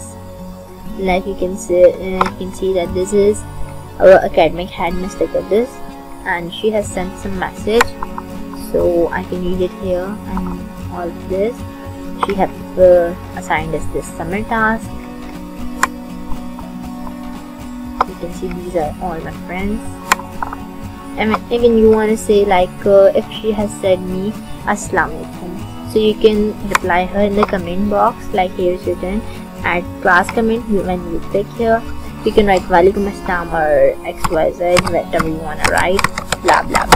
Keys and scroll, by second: 34.1-36.9 typing.